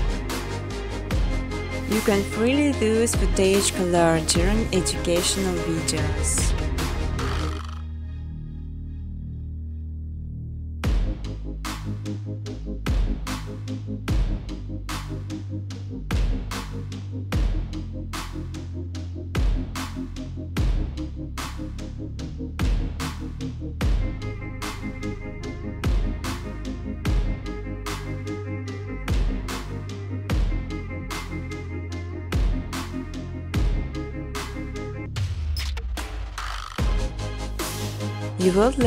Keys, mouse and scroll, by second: 0.0-0.4 typing, 1.4 Return, 4.8 click, 5.6-10.8 typing, 12.5 Tab, 12.9 Tab, 13.6-14.3 typing, 16.7 click, 17.3-18.1 typing, 18.0 click, 19.6 click, 21.9 click, 22.1 click, 22.5 click, 23.0 click, 23.8-26.8 typing, 26.0 scroll, 28.2 click, 28.6 click, 29.0 typing, 29.1 click, 30.8 click, 31.1 click, 32.2-33.1 typing, 34.7 Tab, 35.0 1, 35.4 click, 36.8 click, 38.4 click.